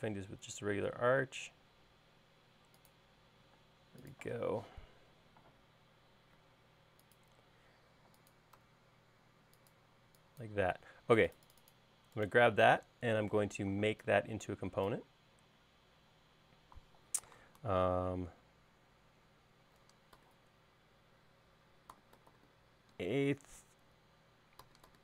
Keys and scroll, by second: 3.9 space, 5.0 q, 6.7 Left, 10.3 e, 20.1-20.5 typing, 22.0-23.1 typing, 24.8-25.0 typing.